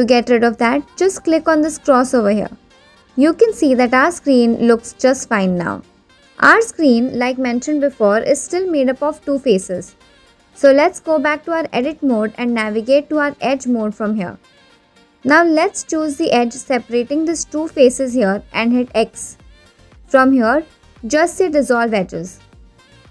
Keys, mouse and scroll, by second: 2.1 click, 12.0 Tab, 14.2 shift+middle click, 19.3 click, 20.4 x.